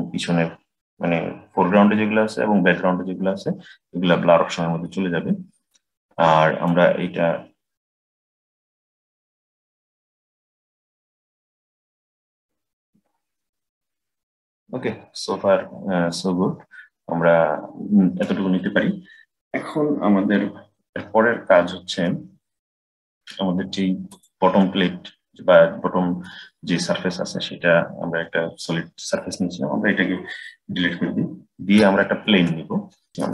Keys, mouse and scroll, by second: 6.5-9.6 drag, 21.9-23.5 middle drag, 23.5-23.9 scroll down 1, 23.9 click, 24.5-27.5 middle drag, 30.6 Delete, 32.0 shift+a, 33.1 Delete.